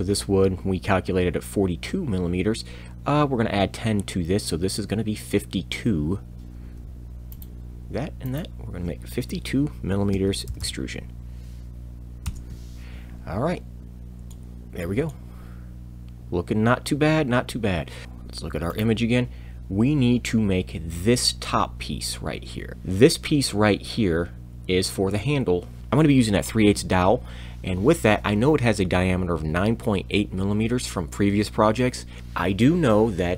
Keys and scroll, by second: 6.4 e, 9.9 5, 10.0 5, 10.1 2, 10.5 m, 12.2 Return.